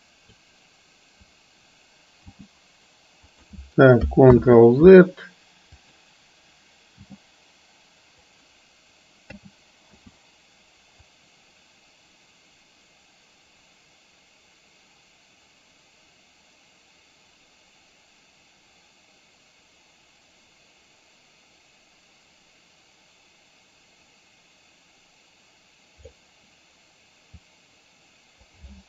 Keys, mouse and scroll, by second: 2.3 g, 4.4 ctrl+z, 6.0 click, 7.2 g, 9.4 a, 10.0 i, 11.2-26.3 drag, 27.7 click.